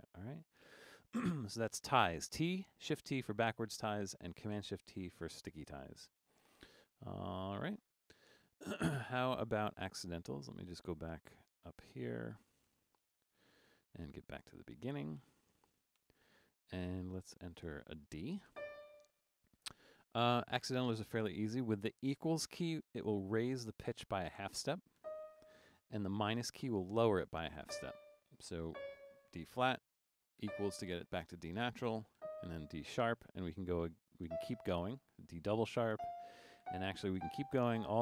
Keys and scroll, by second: 6.8-8.3 typing, 12.7-16.0 typing, 17.7-19.0 typing, 25.0 =, 27.7 -, 28.8 typing, 30.4 =, 34.3 =, 36.0-38.0 typing.